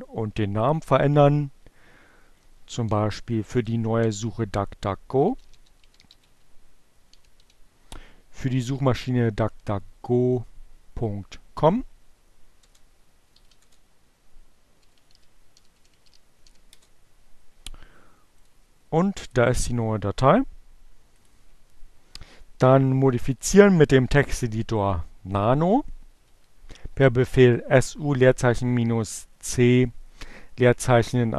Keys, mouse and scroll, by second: 0.7 BackSpace, 2.0 BackSpace, 4.1-6.9 typing, 12.0 Return, 12.9 shift+2, 13.1 shift+Return, 14.0-15.3 typing, 18.0 click, 18.5 click, 19.8-21.0 drag, 24.7 Up, 27.3 Left.